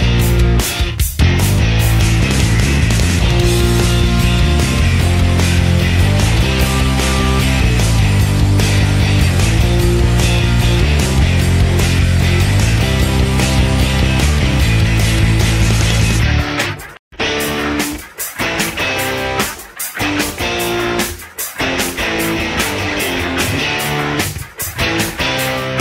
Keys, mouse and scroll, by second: 0.8 shift+click, 1.2 ctrl+shift+z, 1.2 shift+click, 2.1 shift+click, 3.0 shift+click, 4.0 shift+click, 4.6 shift+click, 5.3 shift+click, 6.1 shift+click, 6.3 alt+click.